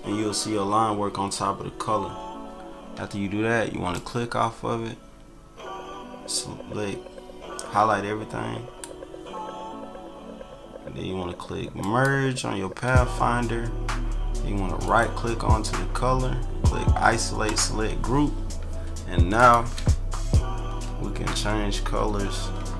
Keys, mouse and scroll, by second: 3.9-8.8 drag, 11.8 click, 14.8 click, 17.4 click, 19.3 click, 19.7 Delete, 21.5 ctrl+-, 22.0 ctrl+=, 22.3 ctrl+=, 22.5 ctrl+middle click, 22.6 ctrl+click.